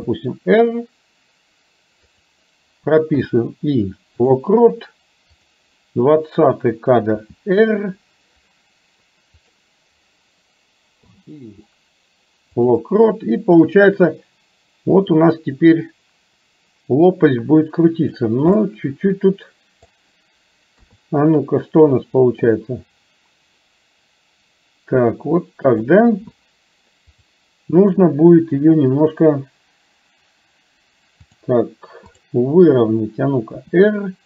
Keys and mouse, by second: 0.1 r, 3.3 i, 5.5 click, 7.3 r, 11.1 i, 13.7-18.3 drag, 18.7-19.9 middle drag, 20.8 KP_3, 22.6-25.9 drag, 27.3-31.6 drag, 33.7 r.